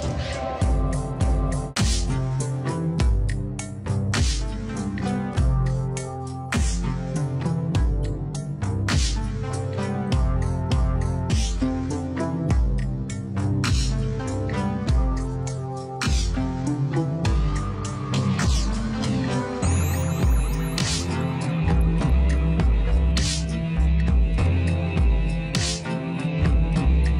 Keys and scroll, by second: 4.5 v, 14.4 ctrl+=.